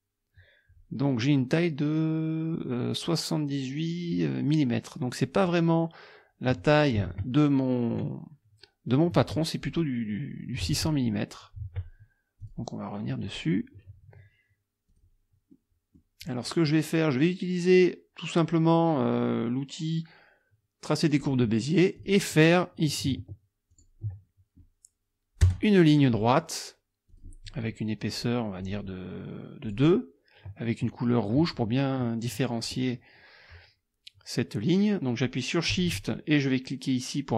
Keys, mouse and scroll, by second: 7.1 alt+Tab, 10.7 alt+Tab, 12.4 alt+click, 14.9 click, 15.5 click, 21.1 click, 22.0 click, 23.7 ctrl+click, 25.4 Return, 27.1 click, 28.6 right click, 29.7 click.